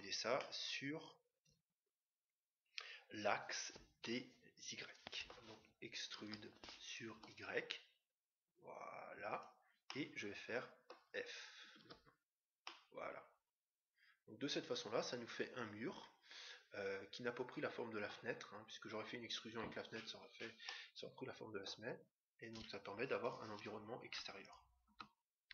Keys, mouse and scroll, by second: 0.3-2.1 middle drag, 6.1 e, 9.8-11.4 middle drag, 11.8 f, 12.7-14.5 middle drag, 20.6-22.2 middle drag, 23.2-25.5 right drag.